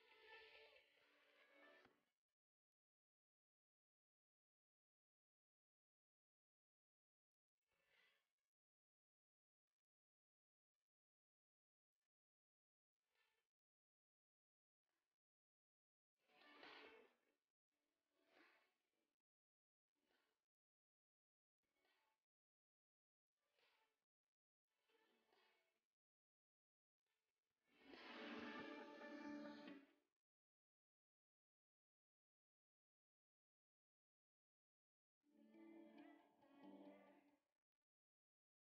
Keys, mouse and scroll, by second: 7.6 s, 15.0 c, 22.8 ctrl+b, 31.3 c.